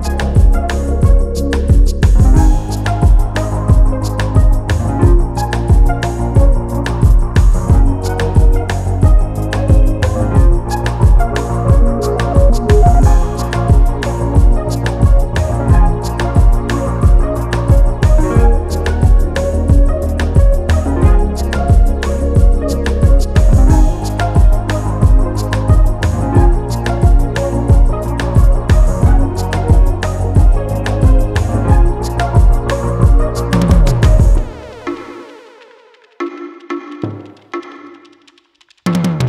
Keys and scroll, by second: 0.3 space, 3.8 space, 6.2 Delete, 6.7 space, 7.4 space, 8.9 space, 17.1 space, 29.2 space, 31.0 space, 31.6 space, 32.6 space.